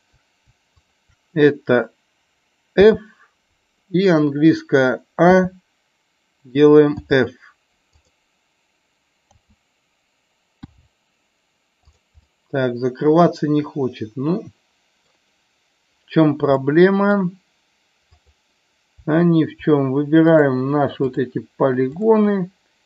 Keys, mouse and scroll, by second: 3.6 middle click, 7.9 click, 12.2-14.0 middle drag, 14.5 middle click, 16.6 middle click, 21.1 shift+click.